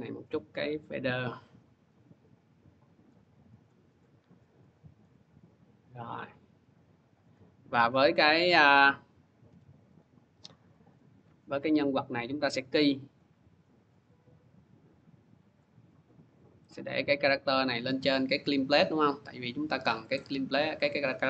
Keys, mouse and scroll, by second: 0.7 click, 1.7 middle click, 2.9 middle click, 3.5 click, 4.8 click, 6.5 click, 7.1 click, 8.8 click, 9.3 5, 9.7 click, 10.7 click, 11.6 p, 13.0 click, 15.3 click, 20.0 click, 20.9 click.